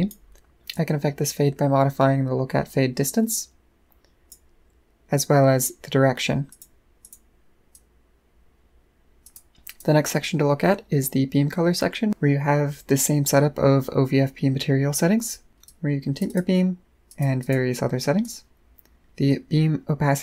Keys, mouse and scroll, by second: 0.7-4.3 drag, 6.5 click, 7.0 click, 7.7-9.2 drag, 9.7 click, 15.2 click, 15.6 click, 16.3 click, 17.1 click, 17.4 click, 18.2 click, 19.4 middle click, 19.6 middle click.